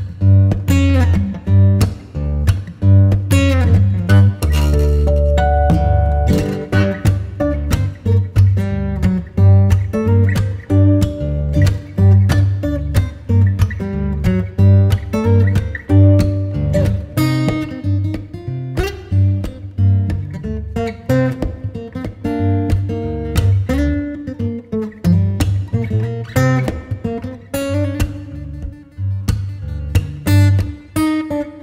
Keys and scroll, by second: 4.9-6.2 typing, 13.9 Return, 15.2 super+0, 18.2 z, 19.9 v, 25.8 shift+super+g, 30.2 Return, 31.0 super+].